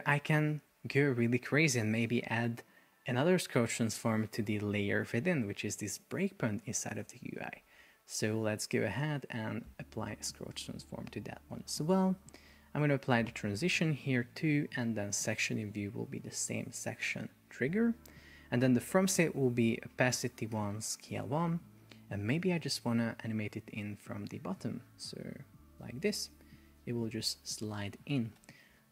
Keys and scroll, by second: 21.1 Return, 28.5 super+p.